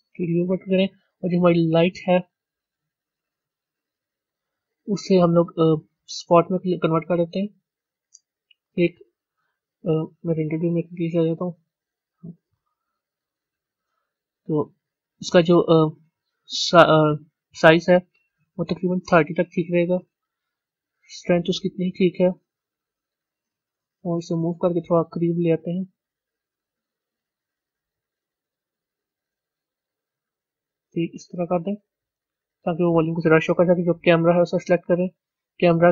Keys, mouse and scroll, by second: 0.0-1.9 drag, 2.6 scroll down 2, 3.6-3.9 scroll up 3, 5.9-7.0 drag, 7.0-10.6 middle drag, 10.6 z, 11.3-12.7 middle drag, 12.7 KP_1, 13.5 scroll down 1, 19.0-22.2 drag, 22.2-24.0 scroll up 6, 24.0 g, 26.4 r, 28.9 g, 31.1 scroll down 1, 34.7 click.